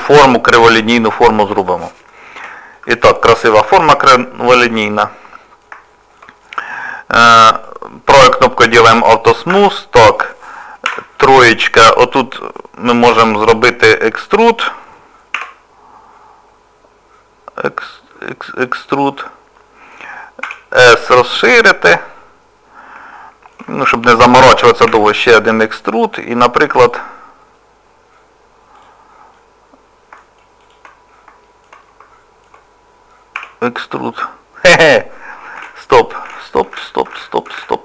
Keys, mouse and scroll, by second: 2.4 Tab, 2.8 middle click, 4.4 shift+middle click, 5.0 middle click, 5.9 middle click, 6.4 middle click, 7.2 click, 7.5 right click, 9.5 Tab, 10.9 3, 11.2 click, 11.6 middle click, 13.2 middle click, 15.3 e, 19.6 middle click, 20.4 s, 22.0 middle click, 23.0 s, 23.8 shift+middle click, 24.9 e, 26.0 middle click, 26.8 click, 28.7 click, 29.4 middle click, 30.6 shift+click, 31.0 scroll down 2, 31.4 shift+middle click, 31.8 middle click, 33.4 e, 35.6 ctrl+z, 36.3 ctrl+z, 37.2 ctrl+z.